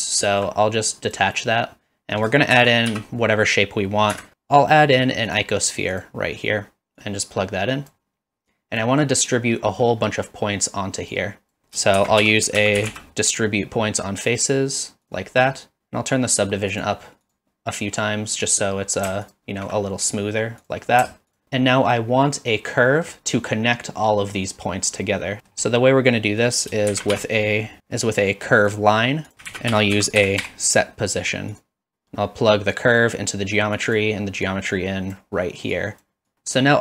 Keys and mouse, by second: 0.9 click, 2.5 shift+a, 7.0-7.9 drag, 8.6 click, 11.1 click, 12.0 shift+a, 16.7 click, 17.2 click, 19.2 alt+shift+click, 21.3 alt+shift+click, 22.0 middle click, 22.9 middle drag, 25.4 middle click, 26.2 middle click, 26.9 shift+a, 29.5 shift+a, 29.9 s, 32.7-33.5 drag, 33.8 click, 34.6-35.2 drag, 35.8 drag.